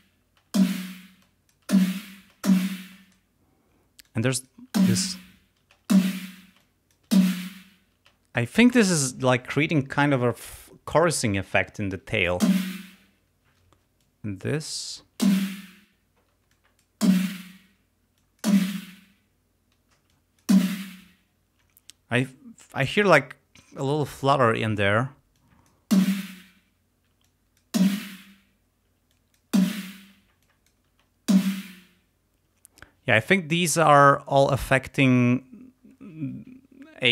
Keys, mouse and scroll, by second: 0.4 space, 1.3 click, 3.0 click, 4.1 click, 4.8 space, 5.7 space, 6.7 click, 8.0 space, 12.4 space, 13.7 space, 14.1-15.1 drag, 15.2 space, 16.3 space, 16.5 click, 17.1 space, 18.1 space, 18.2 click, 20.0 space, 20.1 click, 21.6 space, 25.3 click, 25.9 space, 27.1 space, 27.3 click, 28.9 space, 29.1 click, 29.6 space, 30.4 click, 30.9 space, 32.4 space.